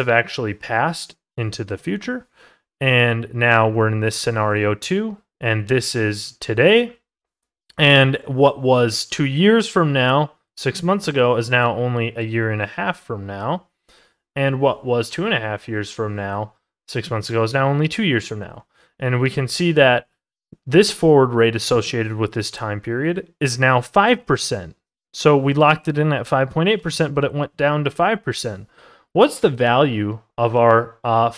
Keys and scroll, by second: 17.5 ctrl+z.